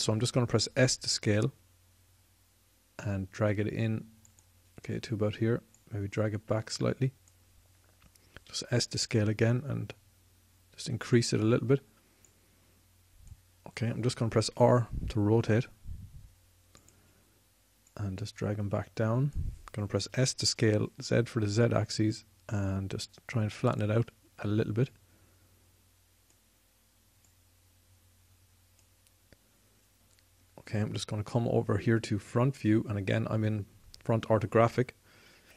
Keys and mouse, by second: 5.9-8.7 drag, 8.7 s, 11.9-14.7 drag, 14.7 r, 17.2-20.3 drag, 20.3 s, 24.0-30.0 drag, 33.0-35.5 middle drag.